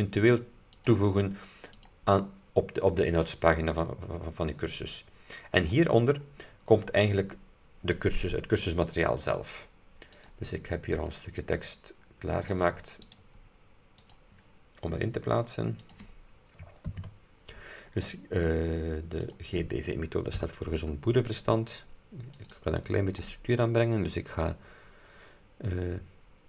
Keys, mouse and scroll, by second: 0.8 click, 1.8 click, 4.2-4.6 scroll down 2, 5.6 click, 6.3-6.7 scroll down 2, 10.3 click, 11.5-12.8 drag, 13.1 right click, 14.1 click, 15.9 click, 17.0 ctrl+v, 18.1-18.4 scroll up 2, 19.3 click, 20.5 BackSpace, 22.4 click.